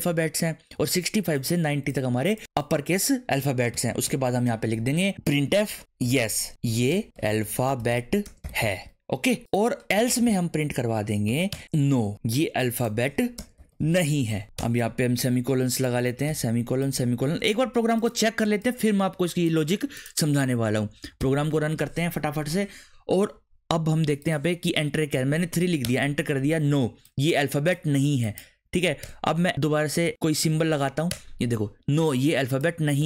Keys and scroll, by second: 3.7 shift+[, 4.1 Return, 5.1-11.9 typing, 11.5 Return, 13.3-14.6 typing, 16.3 ;, 16.9 ;, 17.6 ctrl+s, 25.1 3, 25.8 Return, 28.7 Up, 29.0 Return, 30.4 shift+6, 31.1 Return, 33.0 Up.